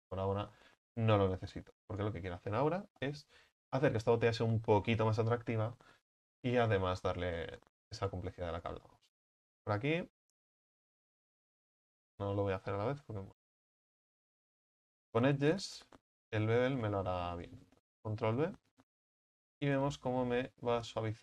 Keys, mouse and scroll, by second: 0.3 Tab, 1.1-1.7 middle drag, 1.7 Tab, 2.0 right click, 3.0 KP_1, 6.7 click, 7.0-8.1 shift+middle drag, 8.1 right click, 8.6 alt+shift+right click, 9.2-14.8 shift+middle drag, 14.8-17.4 drag, 17.4 alt+shift+right click, 18.5 ctrl+b.